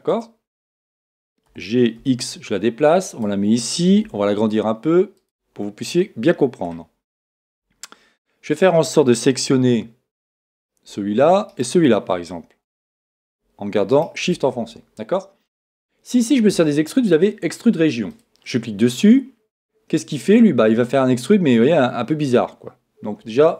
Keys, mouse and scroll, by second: 1.5 g, 4.1 s, 5.6-7.6 middle drag, 7.5 a, 10.5-13.2 right drag, 13.9-15.8 right drag, 18.1-20.0 drag.